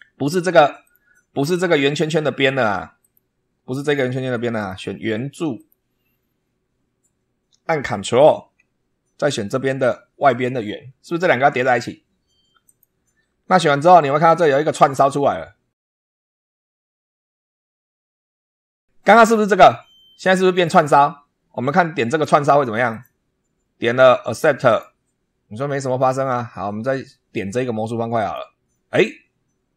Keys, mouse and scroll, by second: 0.7 click, 2.9 click, 3.7 click, 4.5 click, 5.5 click, 12.5 ctrl+click, 22.8 click, 24.6 click, 28.1 click.